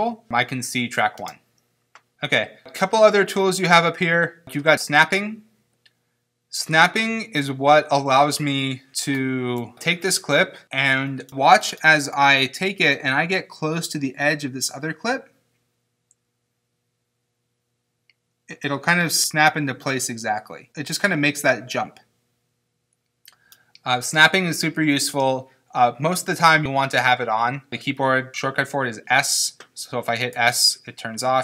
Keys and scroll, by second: 1.2 space, 30.4 s.